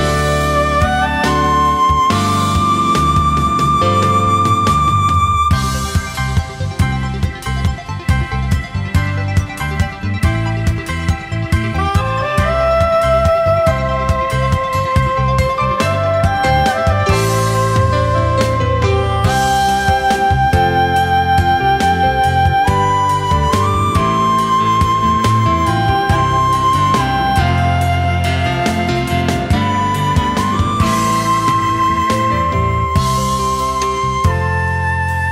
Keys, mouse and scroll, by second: 1.0 alt+scroll up 1, 4.8 ctrl+shift+a, 5.2 alt+scroll down 1, 5.5 space, 6.4-6.7 alt+scroll up 1, 10.8 ctrl+shift+a, 11.2 alt+scroll down 1, 11.5 space, 12.3-12.6 alt+scroll up 1, 12.7 space, 16.9 ctrl+shift+a, 17.3 alt+scroll down 1, 17.5 space, 18.6 alt+scroll up 1, 22.4 ctrl+shift+a, 22.8 space, 23.3 alt+scroll up 1, 26.2 ctrl+shift+a, 26.6-27.0 alt+scroll down 1, 27.1 space, 27.8 alt+scroll down 1, 28.0 space, 28.7 alt+scroll up 1, 29.2 space, 31.1 alt+scroll up 1.